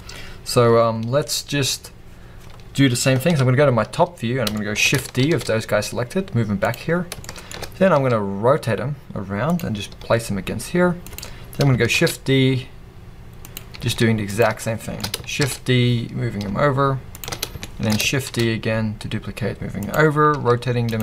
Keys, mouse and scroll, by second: 5.9 shift+middle click, 6.7 click, 6.8 scroll, 7.2-9.6 shift+middle drag, 7.5-7.9 scroll, 7.9 r, 9.6 click, 9.9 g, 11.1-11.9 drag, 13.5 click, 13.8 r, 14.4 click, 14.6-17.4 shift+middle drag, 17.4 scroll, 17.6-19.9 shift+middle drag, 19.9 click, 20.3 r.